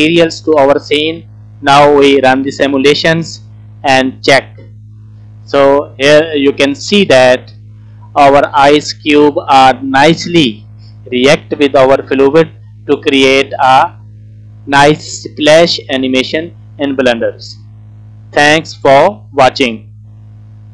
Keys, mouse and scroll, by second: 2.4 space.